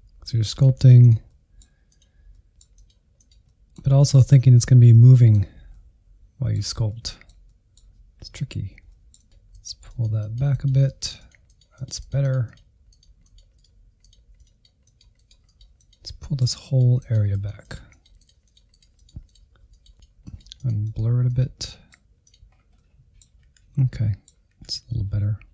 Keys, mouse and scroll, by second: 0.0 scroll down 1, 0.0 middle click, 0.7 Insert, 1.0 shift+middle click, 1.4 Insert, 1.6 middle click, 2.1 z, 2.9 ctrl+click, 3.1 middle click, 3.5 alt+z, 3.7 middle click, 3.9-4.4 scroll up 1, 4.4-7.6 drag, 7.6 middle click, 7.9 click, 8.1 middle click, 8.7-11.8 drag, 11.8 middle click, 12.1 click, 12.5 scroll down 2, 12.6 middle click, 12.8 click, 13.5 middle click, 13.8-15.8 drag, 15.8 middle click, 16.0-17.1 drag, 17.1 middle click, 17.4-18.5 drag, 18.5 middle click, 18.7-20.6 drag, 20.6 middle click, 20.9 click, 21.0 scroll up 2, 21.1 middle click, 21.3 Insert, 21.5 middle click, 21.8 Insert, 22.4 alt+z, 22.8 ctrl+click, 23.0 alt+z, 23.4 click, 24.2 alt+z, 25.0 ctrl+click, 25.2 scroll down 3, 25.2 middle click.